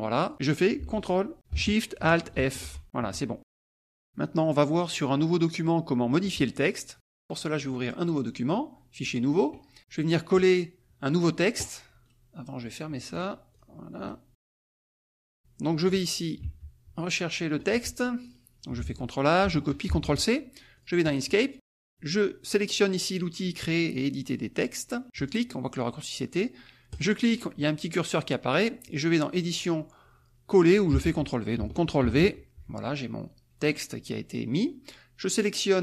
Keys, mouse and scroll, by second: 0.2 click, 2.6 ctrl+alt+shift+f, 3.4 click, 7.6 click, 9.0 click, 10.3 click, 12.0 right click, 12.6 click, 13.2 right click, 13.5 click, 14.0 right click, 14.4 click, 14.8-17.8 drag, 18.2 alt+click, 19.4 ctrl+a, 19.8 ctrl+c, 20.8 click, 21.4 middle click, 25.2 click, 26.9 click, 29.5 click, 30.9 Escape, 32.0 ctrl+v.